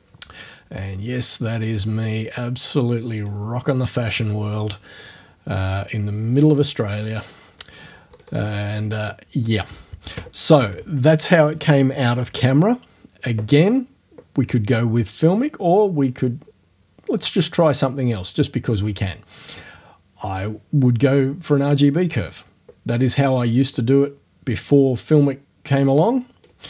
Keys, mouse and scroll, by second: 1.4-3.4 drag, 5.0-7.5 drag, 8.2 click, 15.4 click, 20.3 click, 21.8 click, 23.8-26.6 drag.